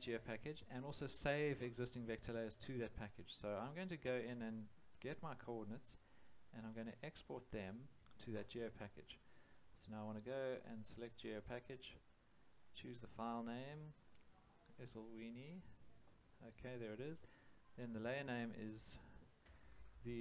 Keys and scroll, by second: 19.4 BackSpace.